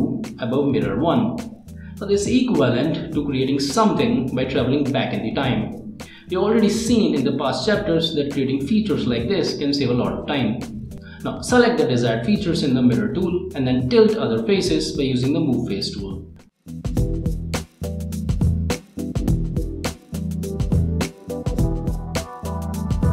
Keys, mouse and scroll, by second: 0.4 middle click, 0.9 scroll up 1, 2.8 click, 4.4 middle click, 5.7 click, 6.4 right click, 7.3 click, 8.3 right click, 8.7 scroll up 1, 8.8 middle click, 9.5 scroll up 1, 9.7 click, 10.4 middle click, 11.1 middle click, 12.2 click, 12.8 click, 12.9 scroll down 1, 13.1 click, 13.9 click, 14.4 click, 15.0 click, 15.2 1, 15.5 Return, 15.7 click, 16.5 Tab, 16.9 click, 17.5 1, 17.9 Return, 18.2 click, 18.4 scroll up 1, 18.7 middle click, 19.8 ctrl+middle click, 19.9 ctrl+s, 20.4 click, 22.7 click.